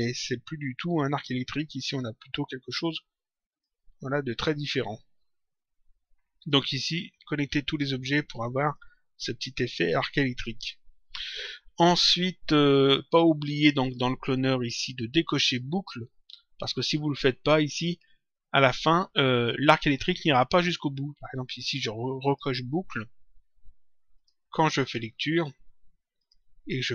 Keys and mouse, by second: 1.7 click, 3.5 click, 6.3 click, 7.6 click, 10.9 click, 13.7 click, 22.1 click, 24.1 click, 26.1 click.